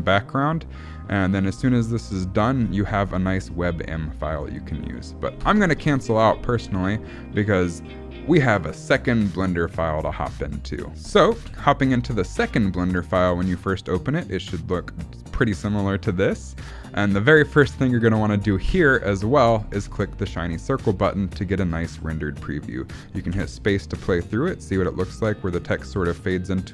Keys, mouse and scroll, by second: 11.1 click, 20.3 click, 23.4 space.